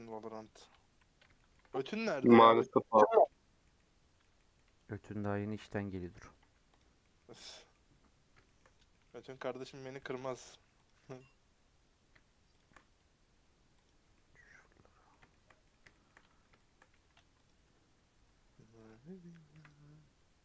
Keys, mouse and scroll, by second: 0.0-3.1 middle drag, 3.1 scroll down 3, 3.3-4.5 middle drag, 4.5-5.1 scroll up 3, 5.1 middle click, 6.0 alt+click, 6.8 right click, 7.0 middle click, 7.2 scroll down 3, 7.5 middle click, 7.9-8.4 scroll up 6, 8.4 shift+middle click, 9.0-9.3 scroll up 4, 9.3 middle click, 9.8 scroll up 1, 9.9 middle click, 13.8 right click, 14.0 scroll down 2, 14.1-15.7 middle drag, 15.7-16.5 scroll up 7, 15.9 shift+middle click, 16.5-17.7 shift+middle drag, 17.7 click, 19.5 KP_Decimal, 20.1-20.4 scroll down 10.